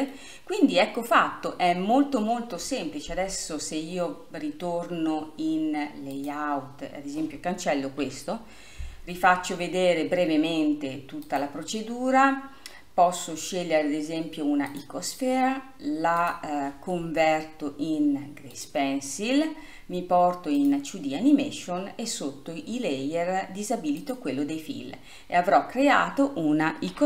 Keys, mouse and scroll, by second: 0.2-3.4 middle drag, 6.3-6.8 drag, 8.2 Delete, 9.5-11.4 scroll down 2, 14.9 click, 18.8-19.4 drag, 19.4 scroll up 3, 20.8 click, 24.1-25.5 drag, 25.5 scroll up 2.